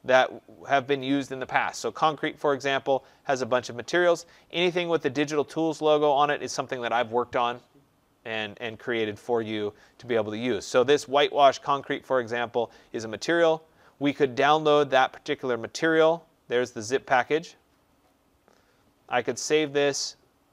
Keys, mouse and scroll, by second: 1.6 click, 3.0 middle click, 3.1 middle click, 8.8 middle click, 8.9 middle click, 13.0 click, 14.5 scroll, 17.3 click, 19.7 click.